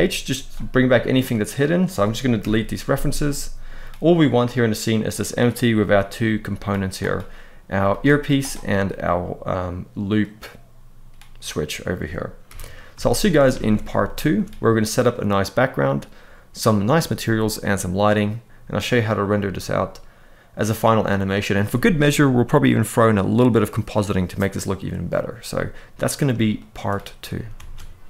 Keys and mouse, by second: 0.8 click, 2.1 Delete, 2.9-3.3 middle drag, 5.0 click, 5.5 g, 5.9-6.2 right drag, 6.2 click, 6.7 click, 7.5 click, 8.5-9.9 middle drag, 12.1 KP_1, 12.9 shift+middle drag, 13.2 alt+a, 13.7 shift+middle drag.